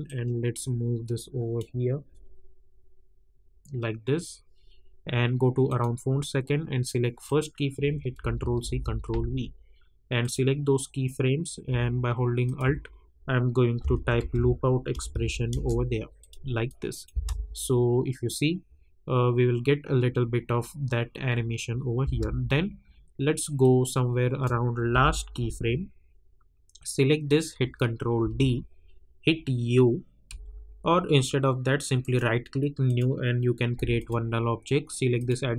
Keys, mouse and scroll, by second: 5.6 click, 8.2 ctrl+c, 8.6 ctrl+v, 10.2 click, 12.4 alt+click, 13.5-14.8 typing, 14.9 Down, 15.5 Return, 16.2 click, 17.1 space, 22.0 space, 23.6-24.9 drag, 24.9 k, 27.2 click, 28.2 ctrl+d, 30.2 u, 32.0 right click, 32.8-35.5 drag.